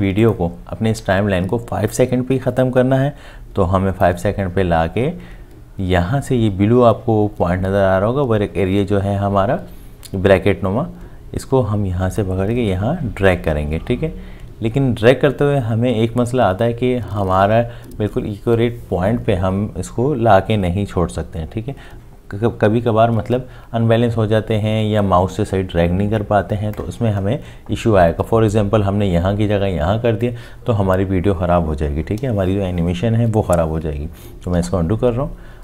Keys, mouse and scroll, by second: 34.6 ctrl+z.